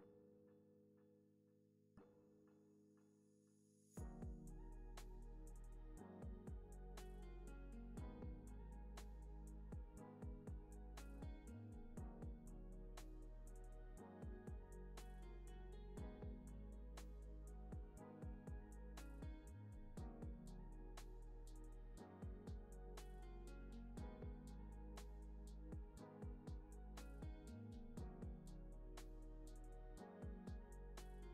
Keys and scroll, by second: 1.1 Right, 4.4 z, 5.6 Down, 7.2 z, 8.0 x, 9.2 x, 11.0 alt+q, 12.0 z, 13.5 alt+q, 14.5 x, 15.1 z, 16.0 super+c, 16.2 super+v, 16.4 x, 17.2 super+c, 17.5 super+v, 18.4 x.